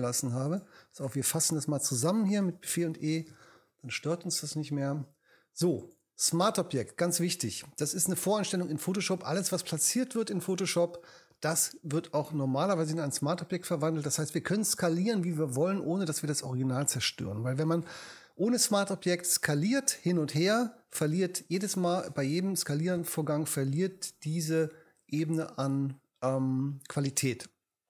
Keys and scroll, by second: 2.4 shift+super+e, 3.5 super+e.